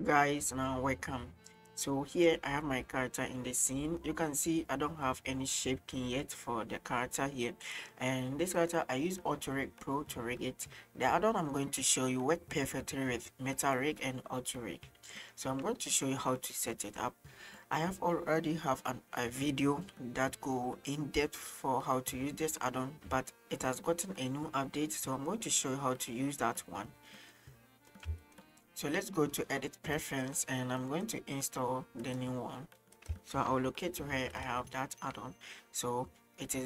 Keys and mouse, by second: 2.9-3.7 middle drag, 3.9 right click, 7.7 middle click, 8.6 right click, 24.6-27.3 middle drag, 27.9 middle click, 28.2 shift+middle drag, 29.6-30.1 drag.